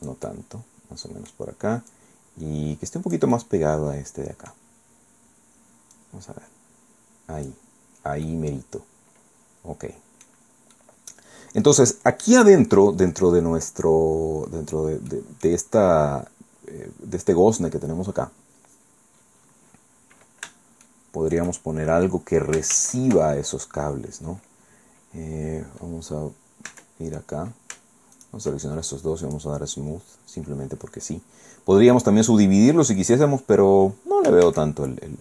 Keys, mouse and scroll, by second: 1.9-4.7 drag, 5.9-7.7 drag, 7.9 scroll down 1, 8.3-10.4 drag, 10.4 scroll down 1, 10.9-11.4 scroll up 1, 15.1 click, 19.1 scroll down 1, 19.4-19.9 scroll up 3, 20.9 shift+click, 21.6 shift+scroll down 2, 22.7 shift+a, 26.7 Tab, 28.1 shift+click, 29.3 click, 30.0-30.3 scroll down 2, 30.7-31.1 scroll up 2, 31.3 scroll down 2, 31.8 scroll up 2, 33.4 scroll down 2, 34.5 shift+a.